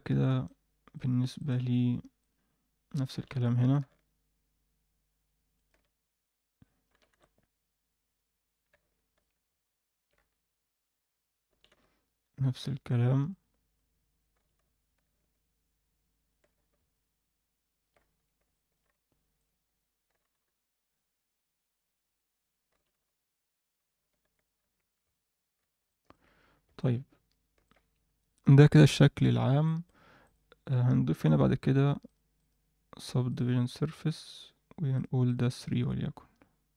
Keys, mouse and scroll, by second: 0.1 alt+a, 0.4-0.9 middle drag, 1.4 click, 1.7 Tab, 2.2 click, 2.8 scroll up 1, 3.1 g, 6.2 click, 6.9 g, 9.3-9.8 scroll down 2, 9.6 middle click, 10.1-10.5 scroll up 1, 10.8 click, 10.8 scroll up 1, 11.5 g, 13.7 click, 14.3 g, 16.5-16.9 scroll down 2, 16.9 middle click, 18.0-18.3 scroll up 2, 18.1 Tab, 18.5 middle click, 18.9 Tab, 19.3 click, 19.6-20.0 scroll up 2, 20.0 g, 22.0 click, 22.7 g, 24.6-25.0 scroll down 2, 24.8 Tab, 25.1 middle drag, 25.5 alt+a, 25.8 alt+middle drag, 26.4 scroll up 1, 26.8-27.6 alt+middle drag, 28.0-28.6 scroll up 1, 29.6 alt+middle click, 30.2 click, 32.0 drag, 32.3-33.3 drag, 34.9 click, 35.2 click, 35.5 click.